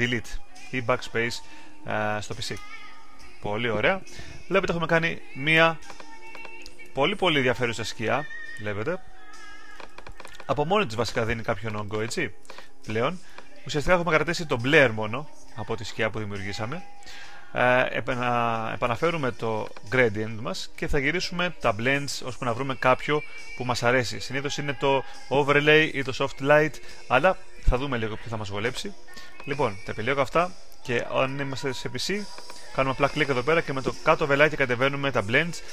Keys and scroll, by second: 4.2 super+d.